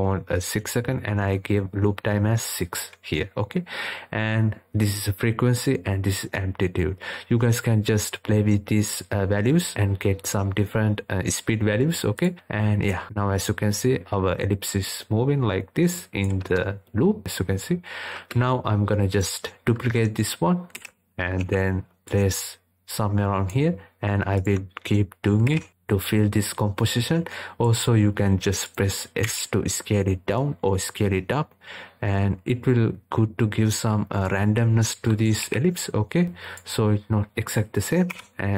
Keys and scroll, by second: 19.9 ctrl+d.